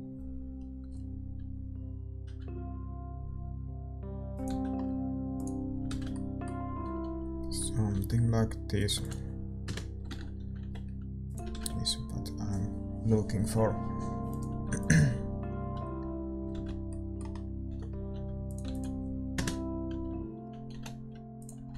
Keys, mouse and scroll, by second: 5.6 ctrl+s, 5.6-7.9 drag, 5.6-7.9 middle drag, 5.9 shift+z, 7.9 r, 9.6 ctrl+s, 9.6 KP_0, 10.6-12.8 middle drag, 10.6 g, 12.8 shift+z, 14.6 ctrl+s, 14.6-16.5 drag, 16.5 shift+z, 16.6-17.6 middle drag, 17.6 g, 19.3 ctrl+s, 19.3 KP_0, 20.7 g, 21.6-21.7 middle drag.